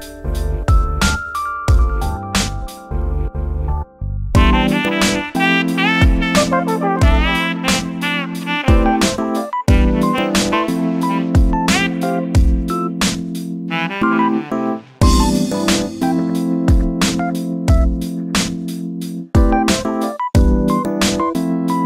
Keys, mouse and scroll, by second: 0.1 scroll down 7, 0.4 shift+middle click, 1.3 scroll up 2, 1.6 shift+click, 2.0-2.5 scroll down 6, 2.5-3.6 scroll up 6, 3.6 shift+click, 4.7 shift+click, 6.0 shift+click, 6.4 shift+middle click, 6.8 scroll up 4, 7.2 shift+click, 7.4-7.8 scroll down 8, 7.8 shift+middle click, 8.1-8.7 scroll up 6, 8.7 shift+click, 9.2-9.6 scroll up 5, 9.9 shift+click, 10.0 scroll down 8, 10.4 shift+middle click, 10.6 scroll down 1, 10.8-12.3 middle drag, 12.3 e, 16.5-16.9 scroll down 3, 16.9-18.8 shift+middle drag, 19.4 drag, 20.0-21.8 drag.